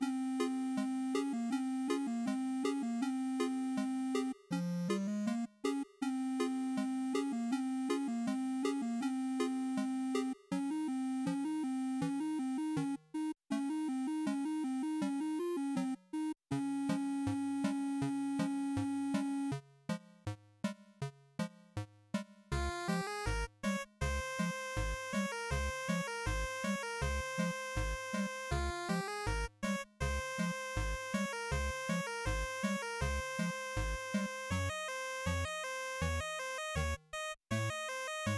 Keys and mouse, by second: 4.5 ctrl+shift+click, 7.1 ctrl+t, 13.9-26.0 drag, 30.1-31.9 drag, 33.9-35.3 drag, 36.7-38.3 drag.